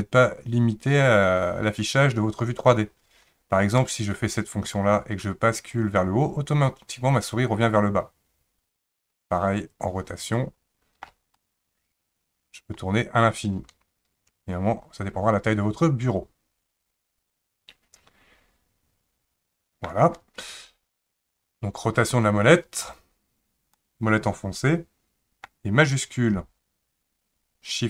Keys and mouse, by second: 3.8-11.1 shift+middle drag, 11.4-19.9 middle drag, 23.8-25.5 middle drag.